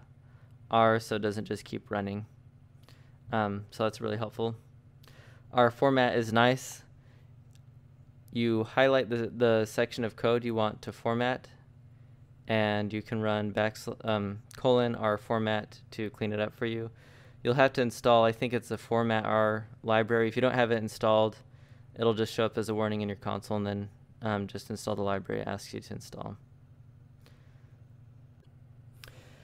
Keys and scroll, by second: 0.8 ctrl+k, 1.4 k, 1.8 k, 5.8-7.7 typing, 10.9 Escape, 11.0 Escape, 13.2-15.8 typing, 17.3 l, 17.7 x, 18.6 x, 20.3-22.6 typing, 25.0 shift+r, 25.5 f, 25.7 space.